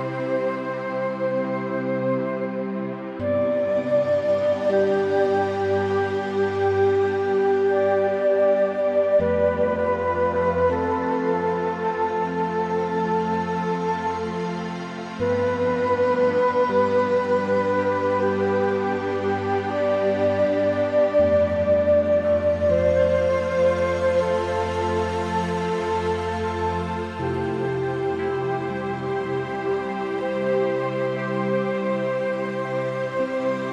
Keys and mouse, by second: 0.0 shift+middle click, 0.2 middle click, 1.8 s, 3.7 Escape, 4.3 s, 5.6 click, 6.6 middle click, 7.4 s, 9.6 click, 9.9 middle click, 10.8 middle click, 11.7 middle click, 12.1 ctrl+z, 12.3 ctrl+z, 12.4 ctrl+z, 12.6 ctrl+z, 13.1 ctrl+z, 13.6 ctrl+z, 13.7 ctrl+z, 14.0 ctrl+z, 14.1 ctrl+z, 14.4 ctrl+z, 14.6 ctrl+z, 15.1 click, 15.3 middle click, 15.9 middle click, 16.7-18.1 middle drag, 18.8 click, 19.1 Tab, 19.6 ctrl+r, 20.0 Tab, 21.0 a, 21.1 ctrl+r, 24.7 click, 25.1 middle click, 25.6 middle click, 26.3 middle click, 27.3 middle click, 27.9 Tab, 28.8 click, 29.8 click, 30.1 middle click, 30.7 middle click, 31.3 Tab, 31.4 click, 32.1 1, 32.4 click, 32.8 click, 33.6 middle click.